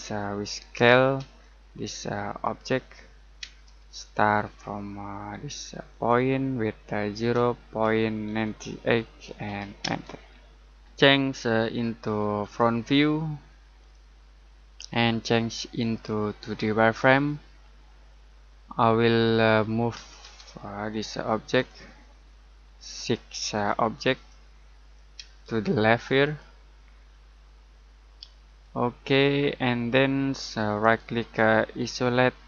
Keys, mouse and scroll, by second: 1.2 space, 2.4 click, 3.4 space, 5.9 click, 7.1-9.8 typing, 12.4 click, 17.8 middle click, 18.6-19.9 scroll up 1, 19.9 m, 20.2 space, 20.5-20.9 scroll up 1, 20.9 click, 22.0 middle click, 23.0 click, 25.2 space, 25.6-26.2 scroll up 1, 26.2 click, 28.9-29.3 scroll down 1, 30.2 middle click, 31.7 click.